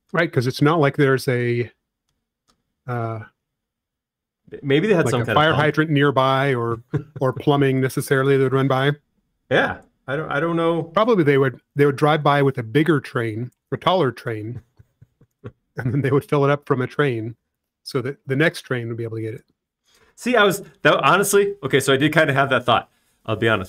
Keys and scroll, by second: 8.2 r, 13.1-20.0 typing, 20.8 Return.